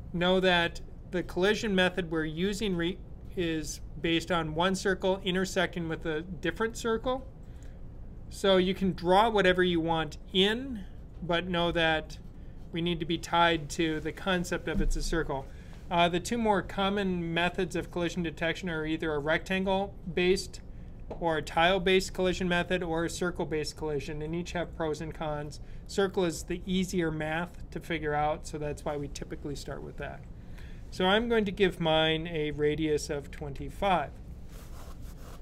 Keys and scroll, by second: 32.8 typing, 34.6 typing.